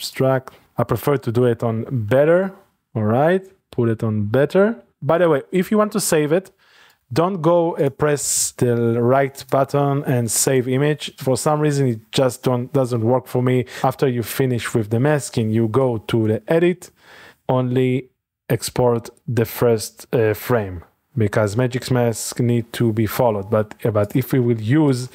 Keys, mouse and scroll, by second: 0.2 click, 5.1 ctrl+middle click, 5.6 middle click, 11.2 click, 11.4 click, 15.8 click, 20.5 Right, 21.1 Left, 21.3 Tab, 21.3 …, 21.7 Left, 21.9 Tab, 22.1 Right, 22.3 Left, 22.4 Right, 22.6 Left, 22.9 Right, 23.1 Left, 24.1 click.